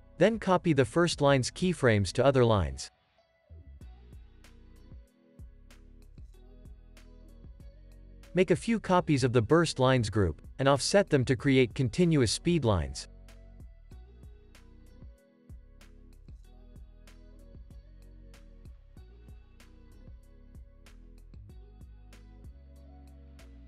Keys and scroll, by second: 2.6 super+c, 3.7 super+v, 5.3 super+v, 5.6 super+s, 6.8 super+s, 9.5 super+d, 21.2 super+s.